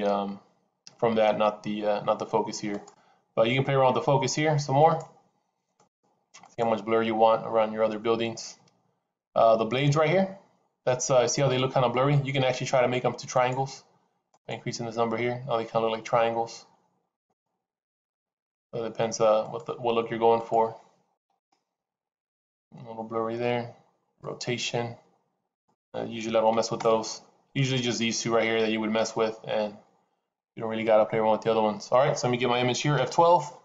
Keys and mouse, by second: 0.0 click, 2.7 click, 4.8 click, 5.8 click, 6.4 click, 13.5 click, 14.4 click, 17.0 click, 18.0 click, 19.5 click, 20.5-23.0 drag, 24.0-25.7 drag, 25.8-27.6 drag.